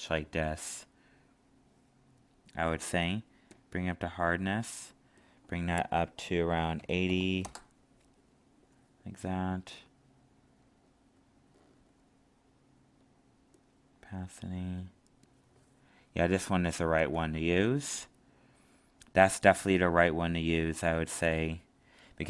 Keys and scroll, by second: 16.9 ctrl+z.